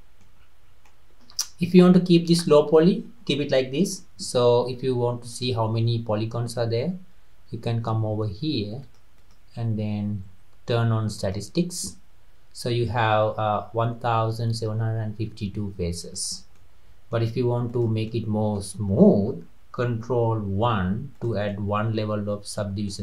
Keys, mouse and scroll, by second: 0.4-0.7 scroll up 3, 0.9-3.9 middle drag, 5.3-8.5 drag, 9.2-12.3 drag, 16.1 drag, 16.5 scroll down 1, 16.6 middle click, 17.1-17.7 scroll up 1, 17.7 click, 18.1 scroll down 1, 18.2-20.6 middle drag, 20.6 ctrl+1, 21.1 drag, 21.5-23.0 middle drag.